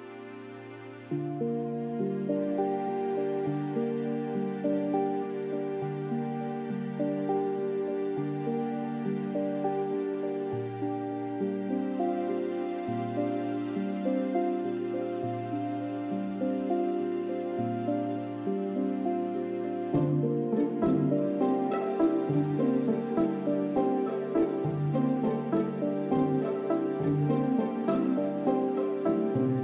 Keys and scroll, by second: 0.4 shift+s, 1.3 shift+s, 2.5 shift+s, 4.2 shift+s, 10.1 shift+s, 12.0-19.0 typing, 14.8 ctrl+z, 21.2 shift+s, 21.9 ctrl+z, 23.8 shift+s, 25.6 shift+s, 26.4 shift+s, 27.5 shift+s.